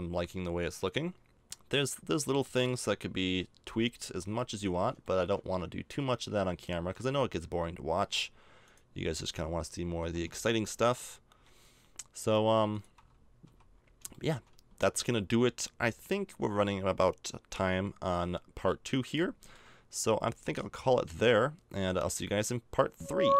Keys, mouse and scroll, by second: 8.6-10.6 right drag, 9.9 r, 13.4 a, 13.7 middle click, 16.6 middle click, 18.1-22.8 middle drag.